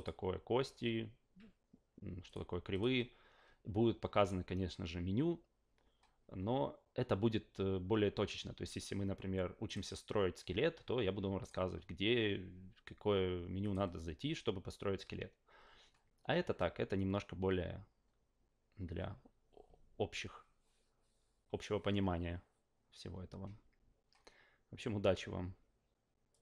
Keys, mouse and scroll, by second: 0.0 click, 2.2 click, 2.7 click, 9.6 click, 11.4 click, 13.6 click, 26.3 click.